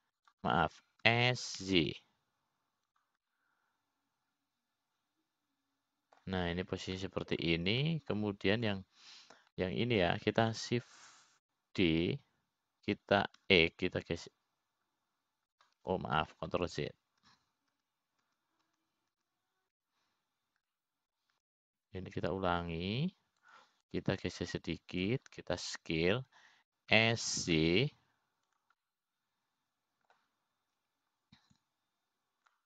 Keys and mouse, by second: 2.0 s, 3.7 s, 5.8-8.8 middle drag, 9.6 middle click, 10.4 middle click, 11.1 click, 12.1 middle click, 14.5 shift+d, 19.1 ctrl+z, 21.7 ctrl+z, 21.9 ctrl+z, 23.3 middle click, 24.5 e, 26.8 click, 29.5 s, 31.4-32.6 middle drag.